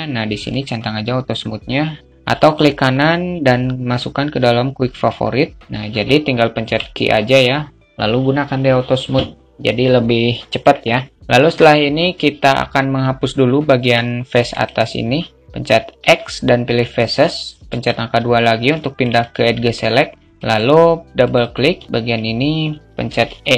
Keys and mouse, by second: 2.1-9.4 right drag, 9.7 alt+middle click, 13.2 Tab, 18.2 alt+shift+middle click, 18.5 alt+middle click, 20.8 click, 21.3 alt+middle click.